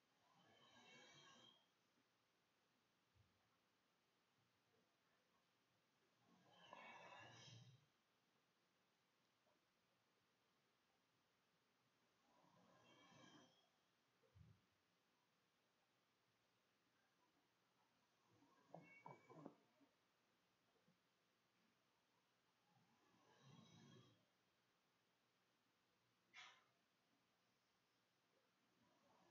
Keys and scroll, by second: 2.7 BackSpace, 2.8 Home, 3.8-6.1 typing, 8.4 BackSpace, 9.1 BackSpace, 11.4 BackSpace, 12.0 Home, 12.7 BackSpace, 13.6 Delete, 14.1 Delete.